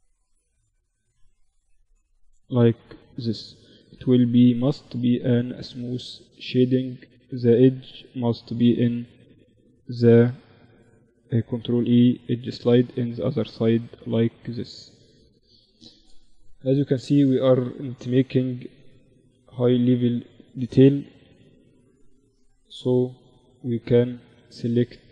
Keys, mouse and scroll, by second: 0.2 Tab, 0.6 Tab, 1.2 ctrl+r, 3.2 Tab, 3.6 t, 5.0-6.9 drag, 5.4 t, 5.9 Tab, 6.5 a, 8.9 right click, 10.7 ctrl+e, 13.8 Tab, 14.6 KP_1, 15.6 z, 16.9-20.8 drag, 22.0-24.0 drag, 23.1 z, 24.0-25.1 middle drag.